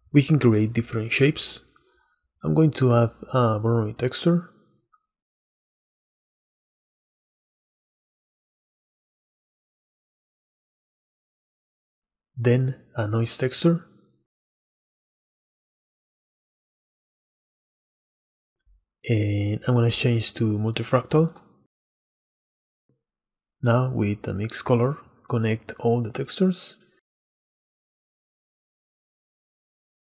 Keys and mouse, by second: 0.5 click, 1.1 middle click, 3.7 shift+a, 9.7 shift+a, 10.0-10.9 drag, 11.2 click, 13.7 shift+a, 18.5-21.2 drag, 21.9 ctrl+z, 22.8 shift+a, 28.0-29.2 drag.